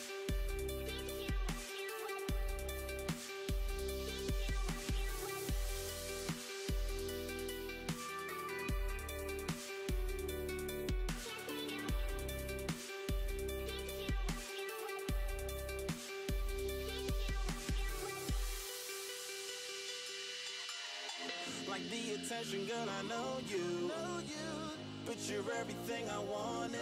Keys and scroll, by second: 1.0-4.2 typing, 9.4 super+a, 13.6 super+d, 21.8-23.8 typing, 25.7 BackSpace, 26.4 l.